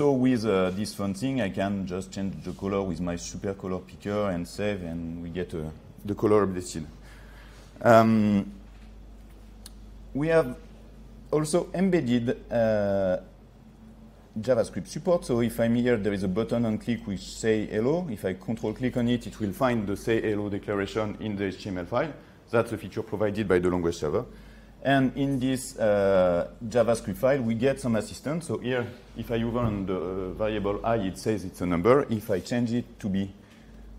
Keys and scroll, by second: 4.9 ctrl+s.